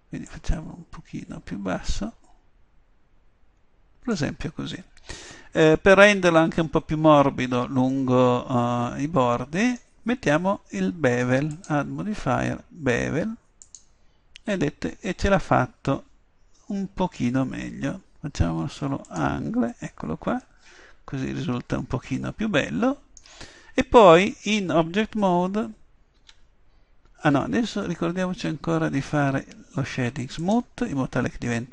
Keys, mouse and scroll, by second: 0.3-2.0 drag, 7.9 middle click, 10.5-11.5 middle drag, 13.3 middle click, 19.1-22.4 middle drag, 26.2 Tab, 30.4-31.7 drag.